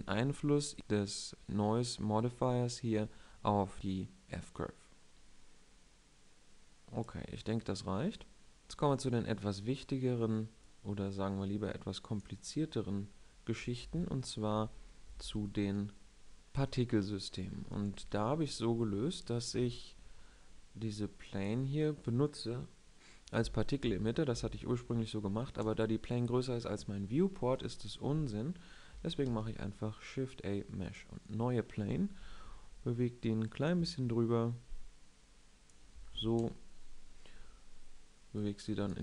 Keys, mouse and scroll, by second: 4.1-5.7 drag, 14.5 ctrl+Left, 15.0 ctrl+Right, 15.2 ctrl+Right, 16.2 KP_7, 17.9 KP_1, 19.5 KP_5, 20.1-21.1 middle drag, 27.5 KP_1, 29.2 shift+a, 33.4-34.9 drag, 36.3 KP_0, 38.3 click.